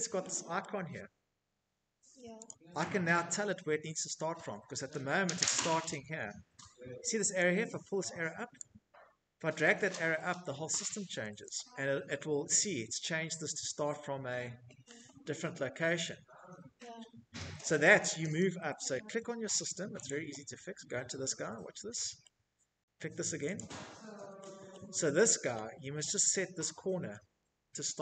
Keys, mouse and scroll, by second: 0.4 click, 1.1 scroll, 2.3-2.6 scroll, 3.5-4.4 scroll, 6.5 click, 8.2 scroll, 9.5 click, 10.4-11.3 scroll, 12.1 Escape, 12.3-13.1 scroll, 12.4 Escape, 13.1 middle click, 17.3 scroll, 18.0 click, 19.1 scroll, 19.6 middle click, 20.1 middle click, 21.5 click, 22.7 middle click, 22.9 middle click, 23.0 right click, 23.0-23.6 scroll, 23.2 middle click, 23.2 click, 25.1-26.0 scroll, 26.6 scroll, 27.8 scroll.